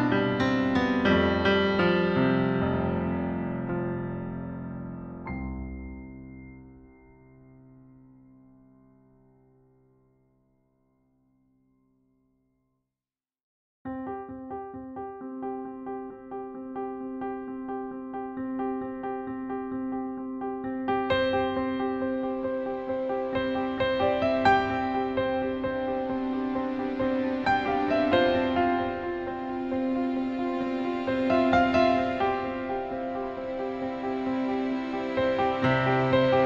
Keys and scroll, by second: 24.0 BackSpace, 24.3 BackSpace, 26.8 BackSpace, 28.9 BackSpace.